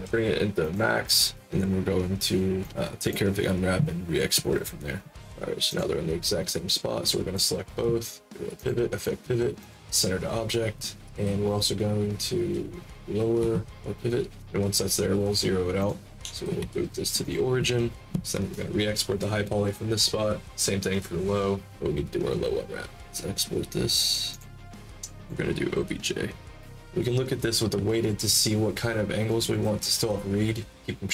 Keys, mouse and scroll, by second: 2.5 click, 5.6 click, 6.4-7.3 drag, 8.5 click, 9.5 click, 13.3 w, 15.7 click, 16.5 w, 17.1 click, 24.2 click, 25.1 click, 28.0 alt+middle click.